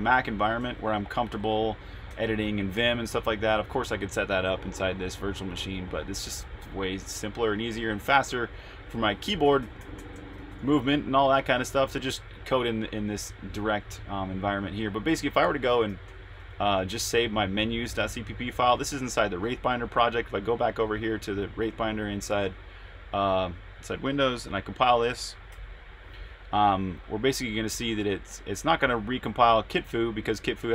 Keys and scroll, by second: 0.5-3.9 typing, 5.7 super+Tab, 7.0-11.3 typing, 13.4 typing, 14.4 Escape, 14.7-16.3 typing, 19.4 super+Tab, 25.5 ctrl+b.